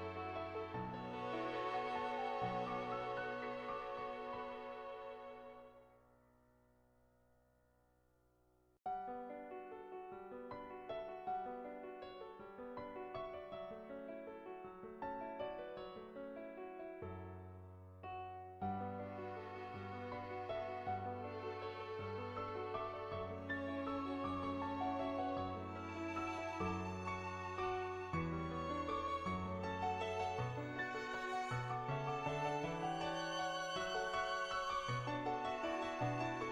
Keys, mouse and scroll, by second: 0.4 ctrl+z, 0.5 click, 1.6 click, 2.9 click, 4.4-7.4 middle drag, 7.5 middle click, 7.9 middle click, 8.7 shift+middle click, 8.8 shift+middle click, 9.1 shift+middle click, 9.8 middle click, 11.4 click, 12.3 click, 12.6 ctrl+z, 12.9 click, 13.4 ctrl+z, 13.6 click, 15.6 click, 17.5 shift+middle click, 17.9-19.5 middle drag, 20.2 middle click, 21.7 middle click, 22.7 click, 23.5 ctrl+z, 23.8 click, 24.8 click, 26.2 ctrl+z, 27.4 middle click, 28.7-30.2 drag, 31.0 middle click, 31.6 ctrl+z, 31.8 middle click, 32.2-33.2 middle drag, 33.4 shift+middle click, 34.0 middle click, 34.8 Tab, 35.7 middle click.